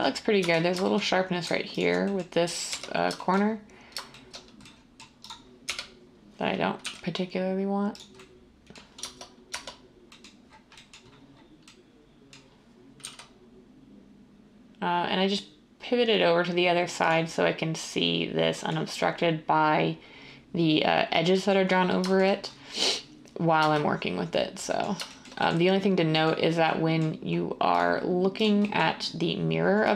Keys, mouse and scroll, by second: 0.4 Tab, 2.7 1, 5.7 1, 6.8 g, 9.0 Tab, 9.5 Tab, 13.0 g.